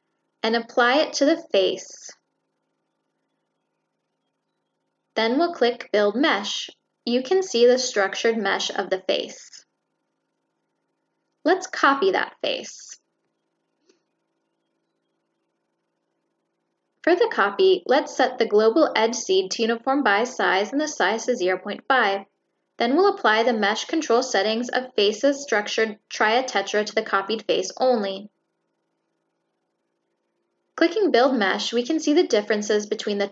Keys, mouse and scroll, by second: 0.1 click, 0.6 click, 1.5 click, 2.1 click, 3.4 click, 4.5 click, 5.8 click, 7.9-8.3 scroll up 1, 11.2 click, 12.1 click, 13.3 click, 13.9 click, 14.4 click, 15.1 click, 16.9 click, 17.5 click, 18.1 click, 18.8 click, 19.3 click, 19.6 click, 20.8 click, 21.1 click, 22.4 click, 23.0 click, 23.6 click, 24.0 click, 24.3 click, 24.8 click, 25.4 click, 25.8 click, 26.4 click, 27.1 click, 28.0 click, 29.6 click, 30.6 click.